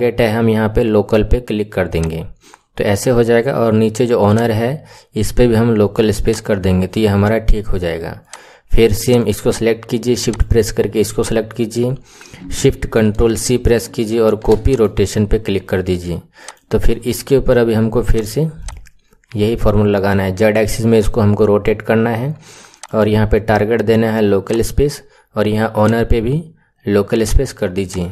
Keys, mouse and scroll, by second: 4.2-7.2 drag, 8.1 click, 9.0 click, 10.2 shift+click, 13.1 ctrl+shift+c, 16.3 click, 18.1 click, 22.7-27.9 drag.